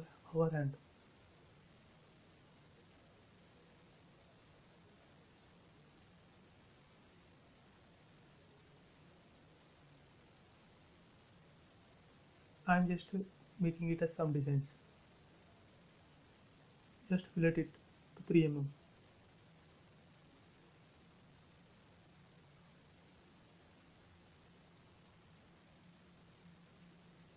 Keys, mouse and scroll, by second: 0.0 scroll up 1, 1.7 click, 4.7 a, 6.0 click, 9.4 click, 10.3 a, 10.9 click, 11.0 click, 12.6 space, 13.4 click, 14.7 f, 15.9 click, 22.5-23.4 typing, 23.1 Return, 24.6 scroll up 1, 25.0 shift+middle click, 25.5 scroll down 1, 25.9-27.3 middle drag.